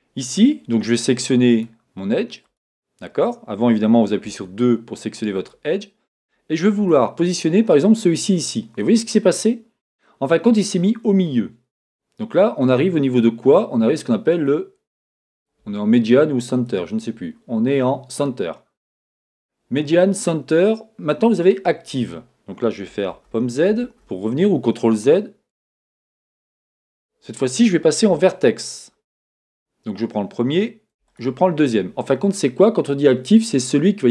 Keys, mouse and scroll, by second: 0.0-1.6 drag, 2.4 click, 4.2 2, 5.4 click, 6.8 g, 15.1 click, 16.5-20.6 drag, 23.1 z, 28.1 1, 29.5-31.1 drag, 31.1 click.